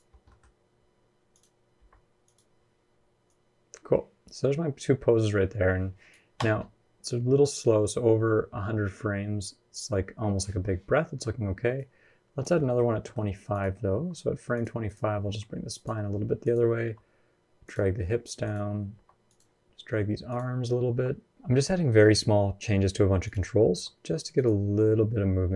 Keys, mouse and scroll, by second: 0.1 middle click, 0.2-0.7 scroll up 3, 1.1 click, 1.6 r, 3.1 click, 6.2 space, 11.3 space, 11.6 click, 12.5 middle click, 12.7 scroll up 1, 12.8 middle click, 13.3 click, 13.7 r, 14.7 click, 15.0 r, 16.2 click, 16.6 g, 18.2 click, 18.7 r, 20.1 click, 20.7 r, 23.0 click, 23.5 r, 25.3 g.